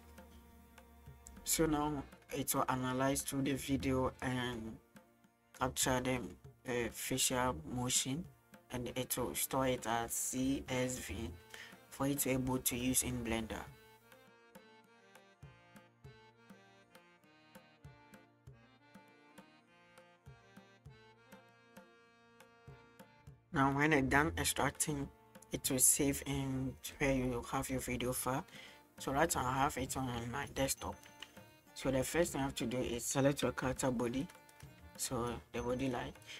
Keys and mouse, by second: 24.8-26.9 middle drag, 31.0-33.0 middle drag, 33.6 g, 34.2 right click, 34.8 g.